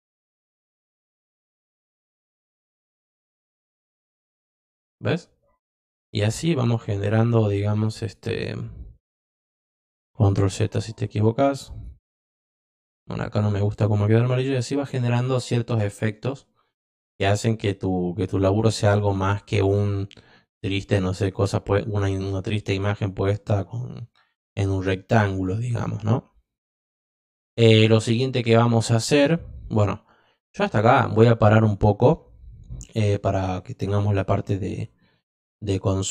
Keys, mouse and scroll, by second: 0.2 click, 2.4 click, 3.7-4.2 drag, 5.8 click, 6.5 click, 8.0 click, 11.1 click, 11.7 click, 13.6 click, 14.3 click, 15.2 click.